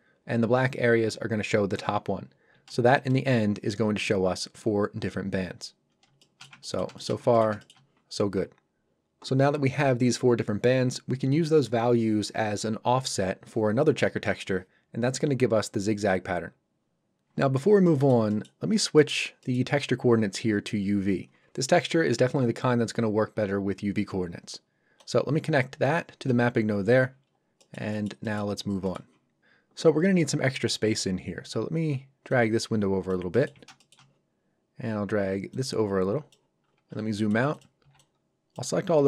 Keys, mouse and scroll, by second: 2.9 ctrl+shift+click, 5.6-5.9 shift+scroll down 2, 6.2 shift+middle click, 6.6 ctrl+middle click, 6.9 shift+middle click, 7.3 ctrl+middle click, 7.6 shift+middle click, 17.8 middle click, 18.6 scroll down 1, 18.8 middle click, 19.1 scroll up 1, 19.4 middle click, 19.8 scroll up 1, 24.9 click, 26.9 scroll down 1, 27.5 middle click, 32.2 click, 33.3 ctrl+middle click, 33.7 shift+middle click, 36.6 scroll down 1, 37.1 middle click, 37.5 click, 37.8 b, 37.9 click, 38.8 g.